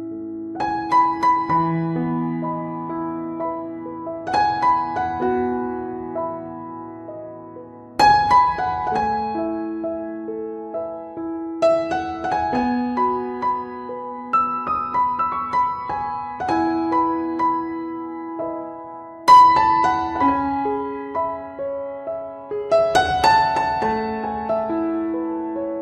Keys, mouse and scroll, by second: 1.6 click, 3.2 middle click, 3.8 click, 5.1 middle click, 5.5 shift+middle click, 5.9 click, 6.9 f, 7.4 f, 7.5 click, 8.6 middle click, 9.4 click, 10.7 right click, 11.3 click, 11.4 click, 12.2-15.6 click, 16.6 f, 16.9 click, 18.0 click, 19.0 middle click, 19.8 click, 20.9 middle click, 21.5 ctrl+right click, 22.0 shift+right click, 22.3 right click, 22.7 f, 23.3 click, 25.0 middle click, 25.5 right click.